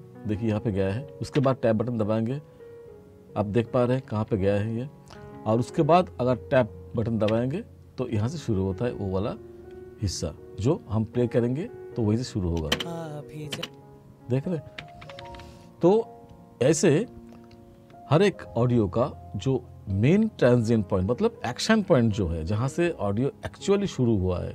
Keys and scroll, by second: 1.4 Tab, 3.8 t, 7.3 Tab, 12.7 space, 14.8 r.